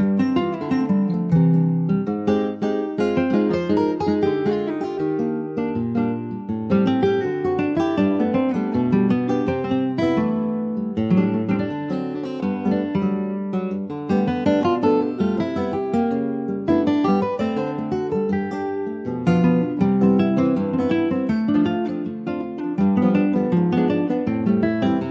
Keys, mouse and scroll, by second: 0.4 middle click, 1.2 ctrl+b, 4.9 middle click, 5.5 ctrl+r, 9.5 ctrl+b, 16.2 ctrl+b, 19.4 click, 19.9 click, 20.6 alt+shift+click, 21.4 click, 22.1 alt+shift+click, 24.1 alt+shift+click, 24.9-25.1 middle drag.